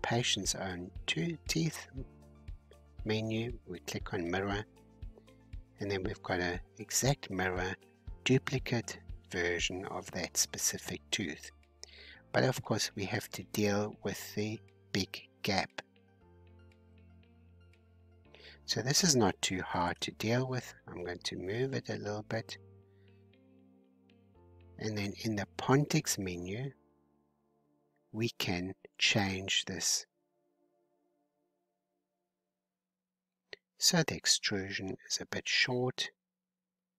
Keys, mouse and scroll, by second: 0.1-1.3 scroll down 3, 1.5-3.1 drag, 3.1-11.0 middle drag, 11.0-11.5 scroll up 2, 11.8-14.8 middle drag, 14.9 scroll down 1, 16.2-18.5 middle drag, 18.5-20.2 drag, 20.7-22.0 middle drag, 22.0 scroll down 1, 22.1-23.2 middle drag, 23.2-23.8 scroll up 3, 23.8-26.7 middle drag, 29.1 click, 31.4 h, 31.9 click, 32.3-33.7 middle drag, 33.7 scroll down 1, 33.8-36.5 middle drag, 36.5 scroll down 3.